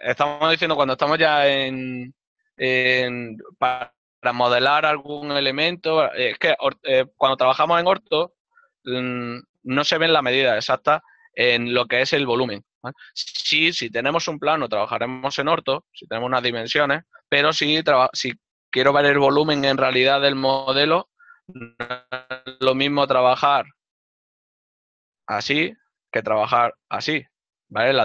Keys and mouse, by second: 23.5 middle click.